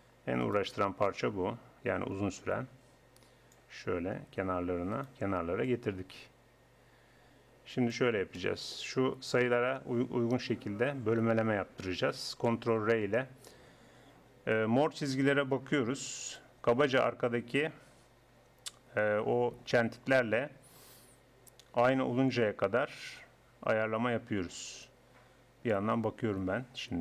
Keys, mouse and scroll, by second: 0.1 click, 0.4 right click, 1.1-2.3 middle drag, 2.3 click, 4.9 right click, 5.7-6.8 middle drag, 6.8 click, 8.4-12.5 drag, 12.5 ctrl+r.